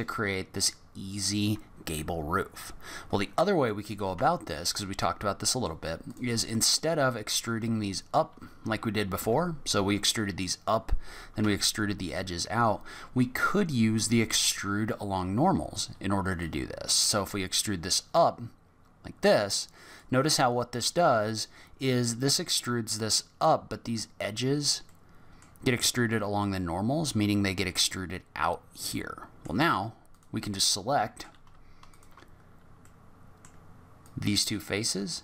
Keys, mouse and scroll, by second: 0.9-1.2 scroll up 1, 2.8-3.7 scroll down 6, 3.7 middle click, 4.1 Tab, 4.5-5.0 scroll up 3, 5.0 middle click, 6.1 click, 6.5 middle click, 7.2 shift+click, 9.2 e, 16.4 click, 24.8 middle click, 29.0 middle click, 29.7-30.1 scroll up 3, 30.1 click, 30.5 middle click, 31.9 shift+click, 32.3 scroll down 5, 32.9 middle click, 34.0 click.